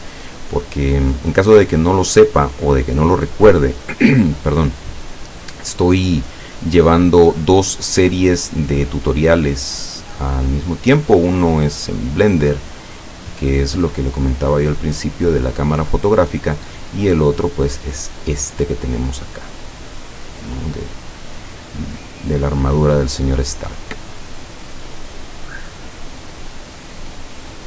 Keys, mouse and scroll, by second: 3.1 click, 4.2-6.1 drag, 10.7-12.2 drag, 12.4-13.6 drag, 14.2-15.5 drag, 19.1 click, 21.9 click, 23.2-26.5 drag, 27.3 click.